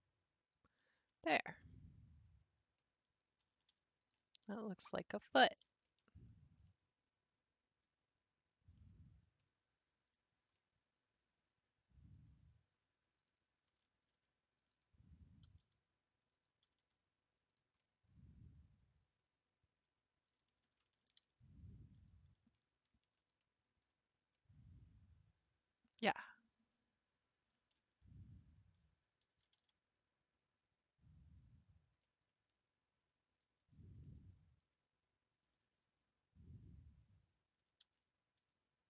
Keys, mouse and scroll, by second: 1.0-4.0 shift+middle drag, 4.0 alt+click, 5.4 middle click, 6.3-6.6 scroll down 3, 6.7-9.1 middle drag, 9.1-9.4 scroll up 2, 9.4-13.2 middle drag, 13.2 click, 13.7 middle click, 14.6 ctrl+click, 15.4 g, 16.6 g, 17.8-20.5 middle drag, 20.5 a, 21.0 ctrl+v, 22.7 scroll down 1, 23.2 shift+middle click, 23.9-24.3 scroll down 2, 24.3-27.1 middle drag, 27.1 scroll up 3, 27.5 middle click, 28.4 alt+click, 29.4 g, 31.6 scroll down 3, 32.0-33.6 middle drag, 33.6-33.9 scroll down 3, 34.0-36.7 middle drag, 36.7 click, 37.8 a, 38.4 r.